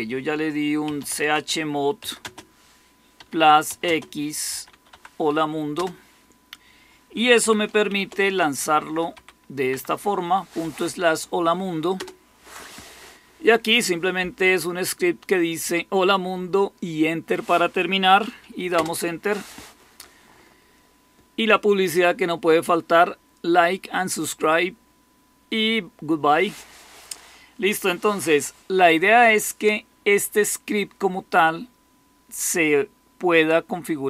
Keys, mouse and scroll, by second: 0.5-5.7 typing, 7.3-9.6 typing, 11.9 typing, 18.7 Return.